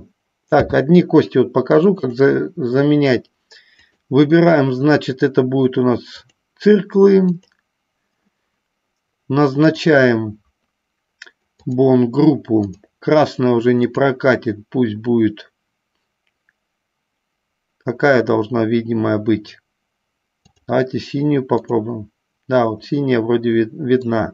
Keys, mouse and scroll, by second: 0.7 n, 4.0-6.6 drag, 7.5 click, 9.7 click, 11.7 click, 14.1-20.8 drag, 21.8 click, 23.1-24.3 middle drag.